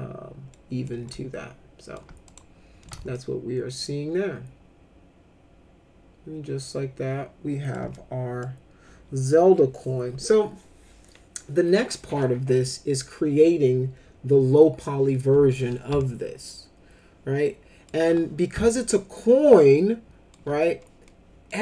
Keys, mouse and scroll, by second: 0.5 middle click, 1.0 alt+middle click, 2.3 click, 2.8 middle click, 3.1-7.7 alt+middle drag, 7.9 middle click, 16.0-17.9 alt+middle drag, 18.6-20.3 alt+middle drag, 21.1 middle click.